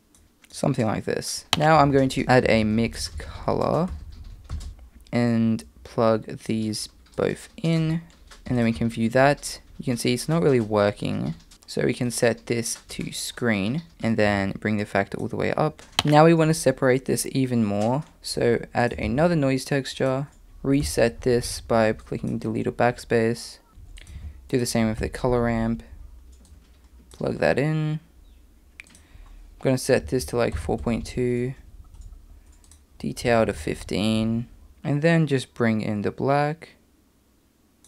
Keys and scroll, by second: 1.9 shift+a, 2.2 Escape, 2.2 Delete, 2.2 x, 4.0 BackSpace, 19.1 shift+d, 20.8 BackSpace, 24.2 shift+d, 25.0 BackSpace, 34.7 super+z.